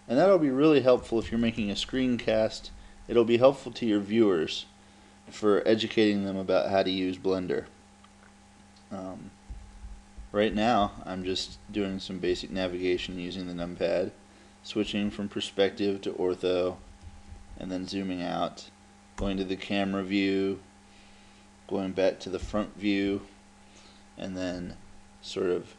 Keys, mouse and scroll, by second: 1.0 KP_Add, 1.2 KP_Add, 1.4 KP_Add, 1.6 KP_Add, 1.8 KP_Add, 2.1 KP_Add, 2.2 KP_Add, 2.4 KP_Add, 2.6 KP_Add, 2.8 KP_Add, 3.0 KP_Add, 3.2 KP_Add, 3.4 KP_Add, 9.5-13.6 typing, 14.9 KP_5, 16.8 KP_Subtract, 17.0 KP_Subtract, 17.4 KP_Subtract, 17.6 KP_Subtract, 19.2 KP_0, 22.5 KP_1.